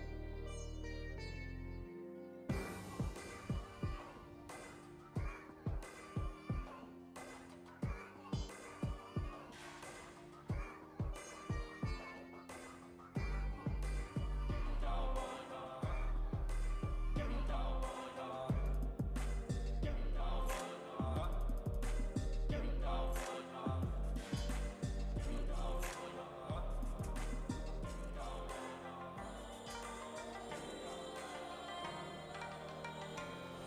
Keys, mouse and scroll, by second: 3.7 space, 4.9 space, 7.3-10.3 drag, 11.0 space, 11.9 space, 12.9-14.8 drag, 14.8 space, 15.8 space, 17.9-21.1 shift+drag, 21.4 space, 22.4 space, 24.4-27.9 shift+drag, 27.9 space, 29.6 space, 31.4-33.6 shift+drag.